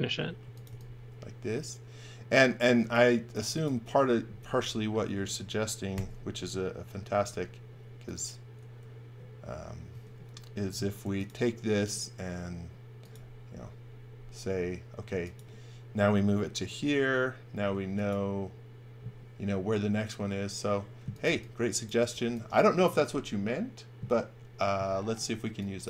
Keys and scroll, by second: 0.1-1.1 typing, 2.6 space, 5.9 g, 7.1 m, 9.8 space, 10.6 m, 17.5 space, 20.7-22.0 typing, 25.3 e.